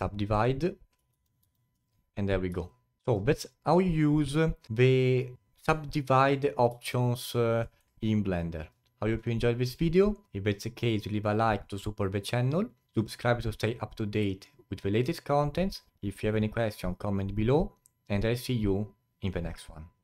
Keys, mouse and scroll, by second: 1.8 click, 2.3-2.7 scroll down 3, 2.7-5.3 alt+drag, 6.8-7.7 alt+drag, 7.7-8.0 alt+middle drag, 8.0-10.8 alt+drag.